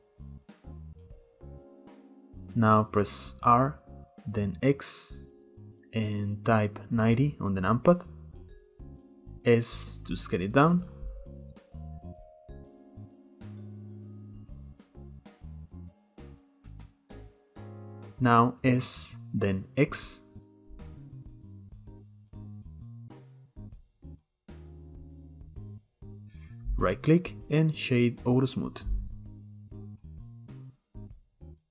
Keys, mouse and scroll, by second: 0.6 scroll down 1, 0.7 middle click, 1.1 click, 1.7 click, 2.2 middle drag, 2.3-2.7 scroll up 1, 2.7-3.4 shift+middle drag, 3.4 r, 9.1 s, 10.7-11.1 middle drag, 11.1-11.6 scroll up 1, 11.6 s, 12.2-12.8 middle drag, 12.8 click, 13.4 click, 13.9-14.8 middle drag, 14.8 scroll up 1, 15.0-15.4 shift+middle drag, 15.4 scroll up 1, 15.5-15.9 middle drag, 15.9 click, 16.4 s, 16.8-17.4 scroll down 4, 16.9-17.3 middle drag, 17.4-18.2 middle drag, 18.2 s, 21.4 click, 22.1 s, 22.8 s, 23.5 s, 24.2 middle click, 24.3-25.0 scroll up 3, 24.5 shift+middle click, 25.0 click, 26.4-29.4 right drag, 29.4-29.9 middle drag, 29.9 click, 30.4-31.7 middle drag.